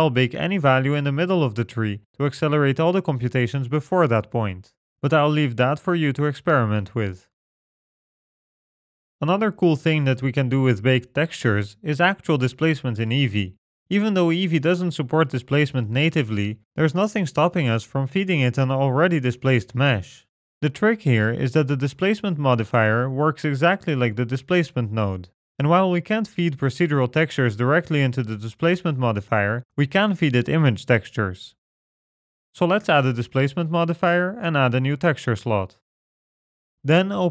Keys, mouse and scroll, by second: 4.2-5.0 scroll up 8, 4.5 middle click, 8.8 middle click, 13.2 click, 17.1 click, 17.8-18.4 scroll down 2, 18.3 middle click, 20.1-20.5 scroll up 3, 25.8 middle click, 26.7 scroll up 3, 28.2-28.8 scroll down 4, 29.0 middle click, 32.1 click, 32.8 middle click, 33.9 click, 36.3 click.